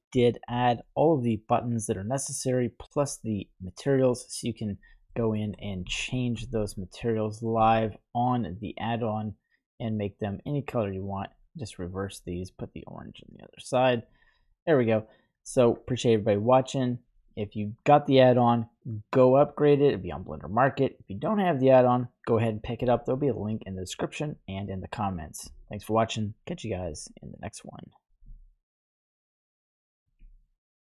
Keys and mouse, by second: 2.7 click, 3.3-4.8 drag, 5.1 middle click, 5.9-6.5 shift+middle drag, 6.7-7.5 ctrl+middle drag, 8.6-10.1 drag, 11.2-11.6 drag, 12.1-13.6 drag, 14.4-15.6 middle drag, 26.8-28.1 middle drag, 28.4-30.1 ctrl+middle drag.